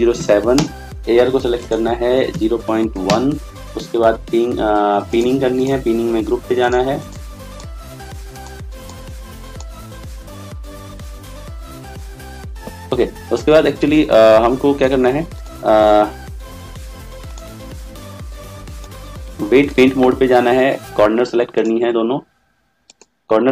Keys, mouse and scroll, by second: 0.0 0.